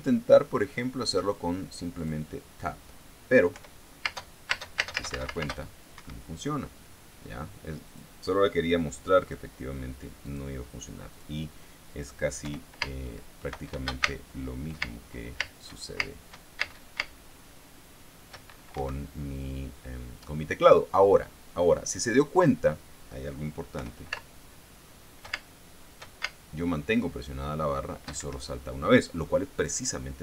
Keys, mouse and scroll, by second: 2.5 click, 4.0 p, 4.5 space, 6.5 Escape, 8.4 click, 9.7 click, 10.8 click, 11.6 click, 12.9 p, 13.3 space, 14.5 space, 19.3 Escape, 22.0 click, 24.3 p, 24.7 space, 28.7 Escape.